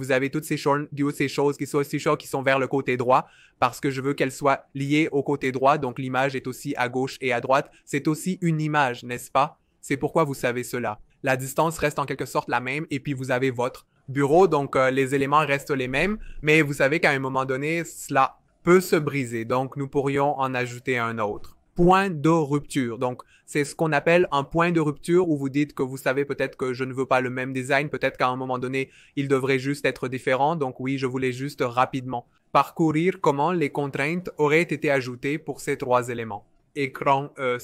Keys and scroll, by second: 14.4 v.